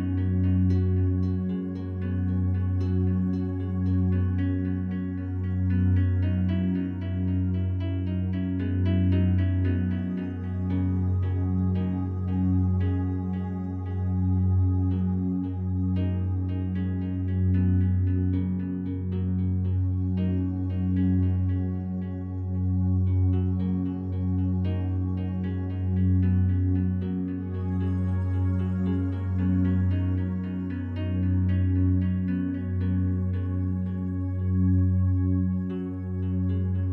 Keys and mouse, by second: 1.5 ctrl+z, 2.6 right click, 3.9 click, 4.8 ctrl+click, 7.2 ctrl+p, 8.6 Down, 9.0 Return, 10.6-11.4 drag, 12.1 Escape, 12.8 Escape, 13.0 Escape, 13.7 click, 14.0 click, 14.4 click, 17.3 click, 18.6 g, 20.1 Escape, 21.1 g, 21.3 y, 22.7 click, 23.6-24.0 ctrl+alt+drag, 24.3 ctrl+alt+click, 25.1 ctrl+alt+click, 25.8 click, 26.0 g, 26.2 y, 27.2-31.6 drag, 34.8 i, 36.5 click.